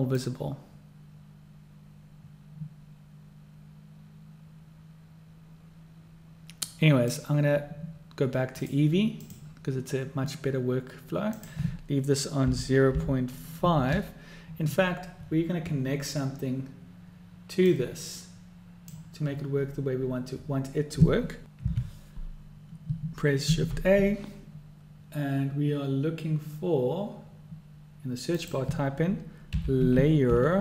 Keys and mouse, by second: 0.3-7.3 drag, 8.7-9.8 drag, 11.4-14.9 drag, 17.7-19.0 drag, 23.6 shift+a.